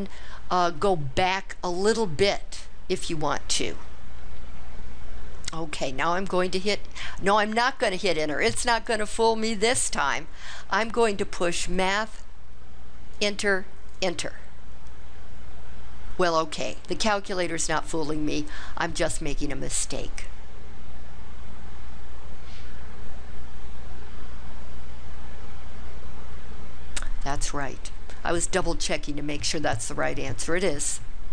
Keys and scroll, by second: 13.2 Return, 14.0 Return.